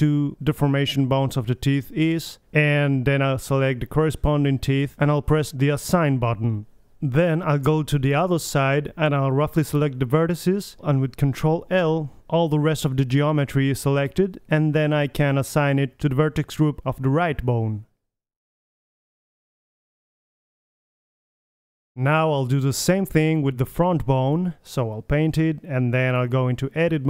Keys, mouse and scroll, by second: 1.4-3.1 drag, 3.1-4.2 middle drag, 7.8-9.5 drag, 10.2-12.3 middle drag, 12.4-14.0 middle drag, 13.0 a, 13.2 c, 15.2 ctrl+l, 16.1-17.0 middle drag, 17.0-17.4 drag, 18.3 middle click, 18.5 click, 18.5 right click, 18.5 middle click, 18.8 click, 18.8 right click, 19.0 middle click, 19.5 Tab, 19.9-20.9 middle drag, 21.5-22.2 drag, 22.2 middle drag, 22.8-23.2 middle drag, 23.8-25.4 drag, 26.4-27.0 drag.